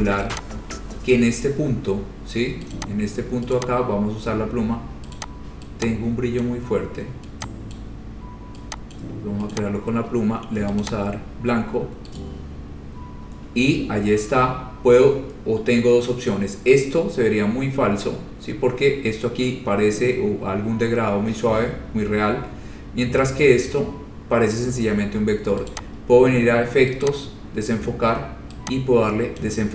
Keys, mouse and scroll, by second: 0.6 click, 1.5 scroll, 2.9 click, 3.8 click, 4.7 scroll, 5.3 click, 6.7 click, 7.9 click, 9.2 click, 9.7 click, 11.1 click, 12.4 right click, 12.7-13.2 scroll, 14.0-14.8 scroll, 17.1-18.0 scroll, 19.0 scroll, 19.7 scroll, 20.6-22.8 scroll, 23.4 scroll, 25.9 click, 27.3 click, 29.6 click.